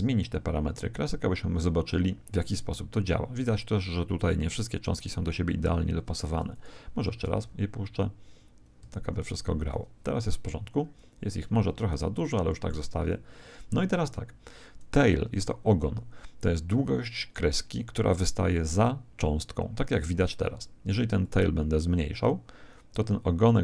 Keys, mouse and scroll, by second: 6.5 click, 7.2 alt+a, 10.6-17.8 middle drag, 21.2 click.